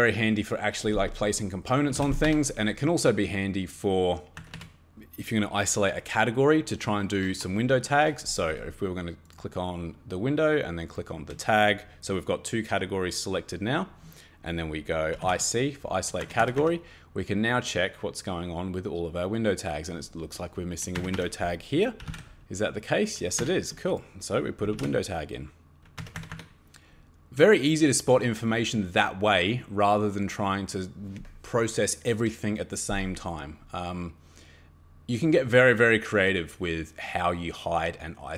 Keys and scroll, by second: 1.9 e, 2.0 space, 2.3 Escape, 4.4 Escape, 4.6 Escape, 14.9-15.7 typing, 16.2 Escape, 16.4 Escape, 16.6 Escape, 20.9 Escape, 21.1 Escape, 21.7-22.6 typing, 23.4 Escape, 24.4-25.2 typing, 26.0 Escape, 26.1 Escape, 26.3 Escape.